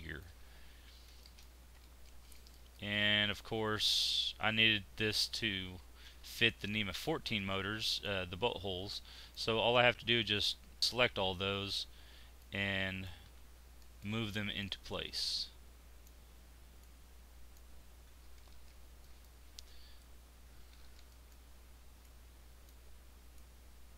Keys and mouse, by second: 0.0 middle click, 0.7 Tab, 5.7 Tab, 7.5 z, 11.3 z, 13.2 z, 17.8 z, 20.3 z.